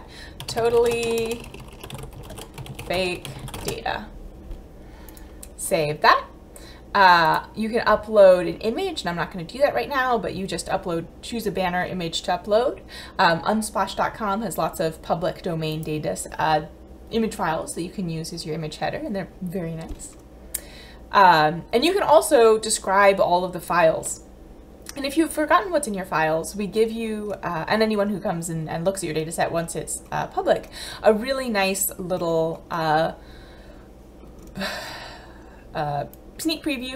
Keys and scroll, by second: 0.0-3.6 typing.